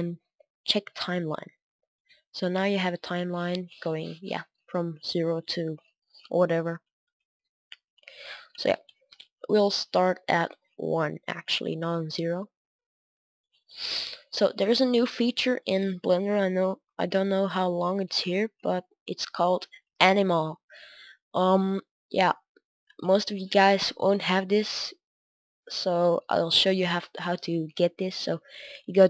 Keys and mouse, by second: 4.8 click, 11.3 Right, 15.5-29.0 drag.